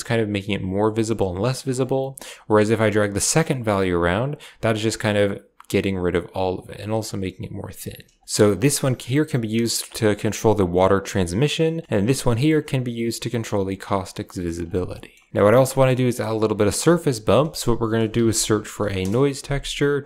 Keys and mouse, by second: 2.8-7.7 shift+drag, 8.1 click, 8.2 middle click, 9.0-11.4 shift+drag, 12.2-14.5 shift+drag, 14.8 middle drag, 15.7 shift+middle click, 16.5 middle click, 17.2 shift+a.